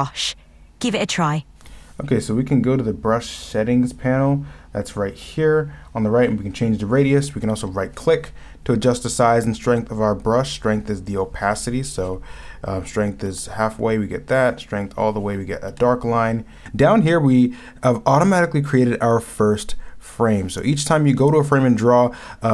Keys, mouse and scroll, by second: 13.5 ctrl+z, 16.0 ctrl+z.